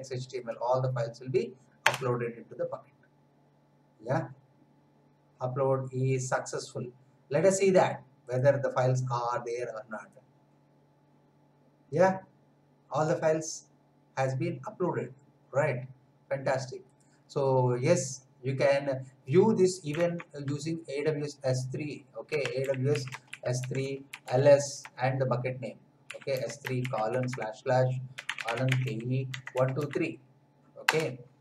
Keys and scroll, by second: 1.8 Return, 20.1 alt+Tab, 22.0-24.8 typing, 25.8-30.3 typing, 30.8 Return.